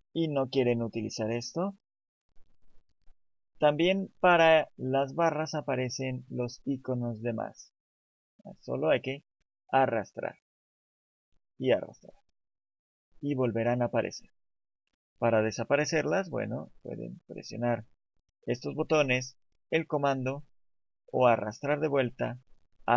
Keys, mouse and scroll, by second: 1.4 click, 1.8 click, 2.0 t, 2.1 n, 7.9 click, 11.6 click, 19.8 click, 20.1 click, 21.4 click.